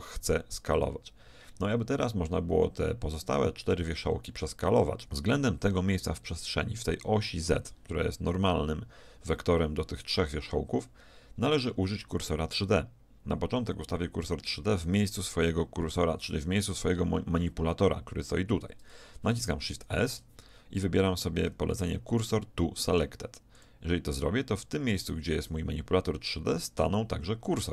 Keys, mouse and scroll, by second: 1.7-3.7 middle drag, 20.0 shift+s, 26.9-27.7 middle drag.